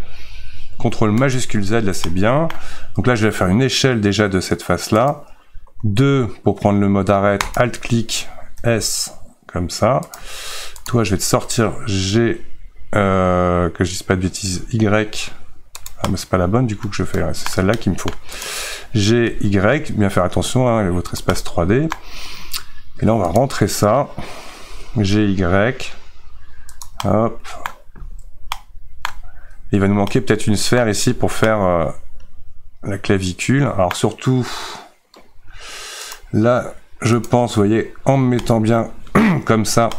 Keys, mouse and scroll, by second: 2.1-3.3 middle drag, 3.3 s, 7.6 alt+click, 8.6 s, 10.9 click, 12.1 g, 16.0-18.5 middle drag, 18.5 click, 19.3 g, 21.3-23.0 middle drag, 23.0 3, 23.4 click, 24.5 g, 27.1 middle click, 27.9-28.5 scroll up 2, 28.5-29.7 shift+middle drag, 29.7 Tab, 30.1 middle click, 30.8-31.5 scroll down 2, 31.5-36.1 middle drag, 36.1 click, 38.4-39.9 middle drag.